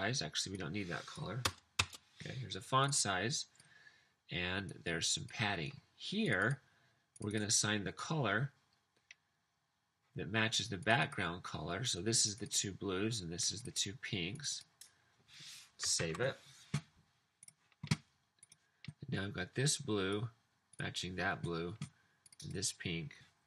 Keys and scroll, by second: 1.5 BackSpace, 1.7 BackSpace, 16.0 super+s.